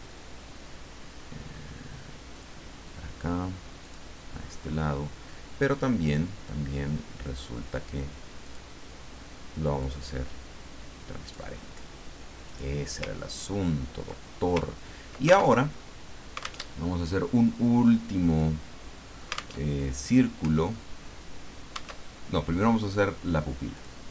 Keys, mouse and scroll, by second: 2.3 click, 3.8 click, 8.4 click, 9.8-11.5 drag, 12.5 click, 13.3-13.9 ctrl+scroll down 4, 14.5 ctrl+scroll up 1, 15.6 ctrl+alt+Tab, 16.6 alt+Tab, 18.3 click, 19.6 alt+Tab, 22.0 alt+Tab, 23.7 click.